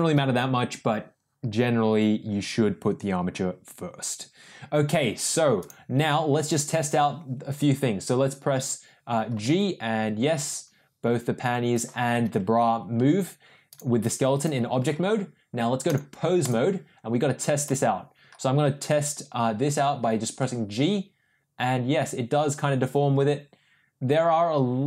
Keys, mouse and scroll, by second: 9.3 g, 12.6 ctrl+z, 13.7 drag, 15.8-16.5 drag, 20.4 g.